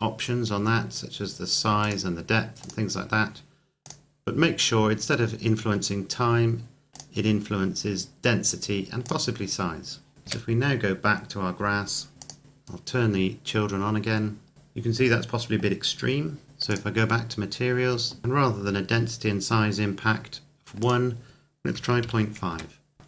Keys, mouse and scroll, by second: 1.8 click, 4.9-5.2 scroll down 1, 6.8 click, 10.4 KP_0, 12.1-14.5 scroll up 2, 12.3 click, 16.6 click, 20.8 click, 21.7 KP_Decimal, 22.0 KP_5, 22.4 KP_Enter.